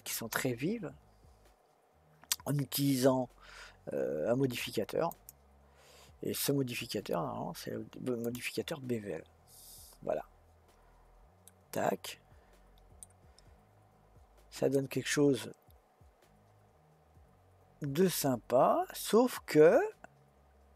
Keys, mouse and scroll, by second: 5.1-8.1 drag, 11.4-14.0 middle drag, 14.0-14.7 scroll up 2, 14.7-17.8 middle drag.